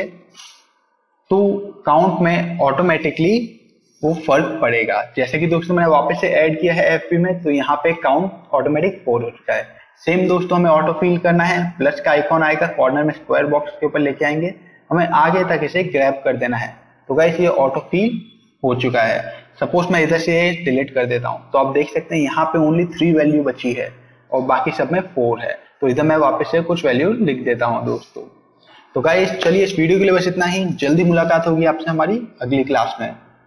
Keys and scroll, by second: 0.2 Num_Lock, 0.7-2.1 typing, 2.4 Return, 20.2 Delete, 25.5-27.0 typing.